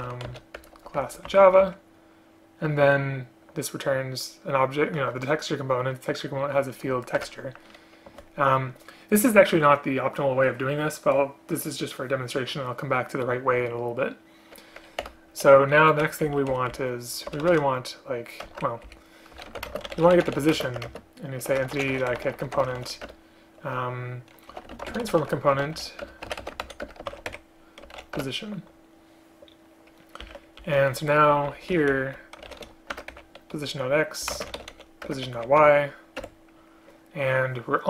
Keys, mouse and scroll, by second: 1.1 Return, 7.3 Return, 15.1 Return, 16.4 Down, 16.6 End, 16.9 Left, 17.4 BackSpace, 17.6 BackSpace, 18.6 ctrl+z, 19.8 Up, 19.8 space, 20.7 space, 21.0 space, 23.1 Return, 26.1 Return, 26.9 Return, 28.3 Return, 30.7 Left, 30.8 Left, 31.4 Left, 31.8 shift+End, 32.0 shift+Left, 33.0 Return, 34.4 space, 35.2 Return, 36.3 Escape.